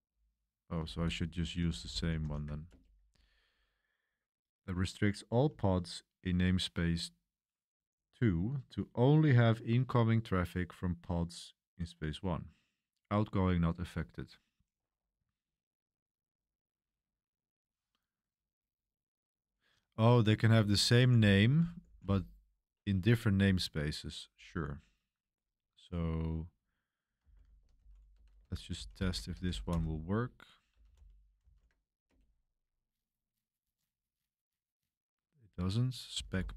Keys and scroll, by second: 0.9 ctrl+c, 1.3-4.8 typing, 7.4 typing, 20.5 Escape, 21.6-22.5 typing, 22.8 Return, 26.9-32.2 typing, 35.8-36.5 typing.